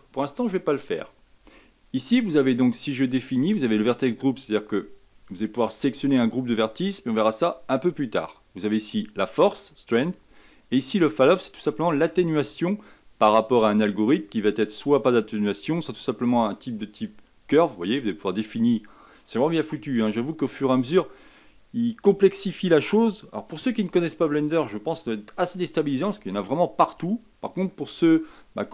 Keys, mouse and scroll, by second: 11.1-28.7 drag.